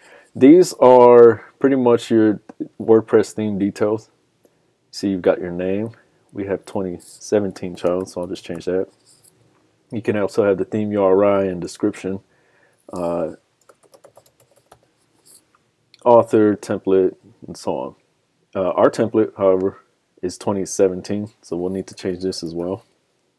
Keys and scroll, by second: 1.0 super+=.